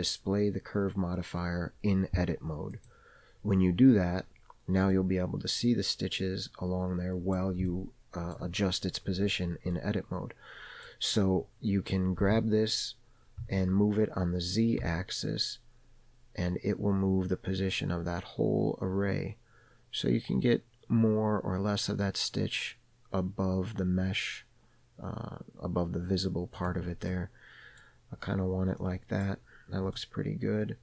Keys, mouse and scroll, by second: 2.9 click, 5.0-7.5 middle drag, 5.0-6.1 scroll up 1, 7.8 shift+middle click, 9.8 scroll up 1, 9.8-11.0 middle drag, 12.3 g, 27.2 middle click, 28.1-28.9 scroll down 2, 28.9 middle click, 28.9-29.3 scroll down 1, 29.5-30.0 scroll down 1, 30.0-30.8 middle drag.